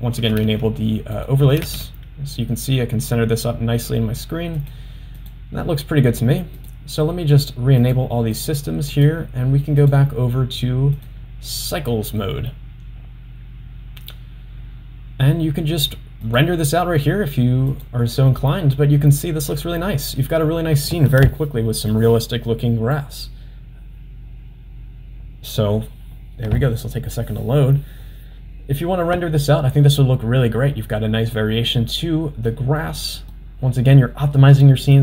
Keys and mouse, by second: 0.2 g, 5.2 click, 5.4 g, 7.9 click, 8.4 click, 9.0 click, 9.9-12.3 drag, 16.3 click, 17.8 click, 32.5-33.2 middle drag, 33.4-34.0 middle drag, 34.7-35.0 middle drag.